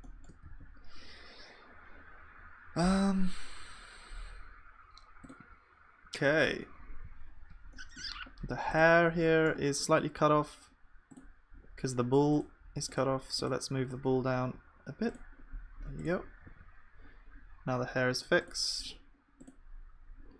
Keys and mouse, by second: 0.5 ctrl+s, 7.7-16.5 middle drag, 9.4-16.5 drag, 9.4-16.5 right drag, 16.5 ctrl+s, 19.8-20.3 drag.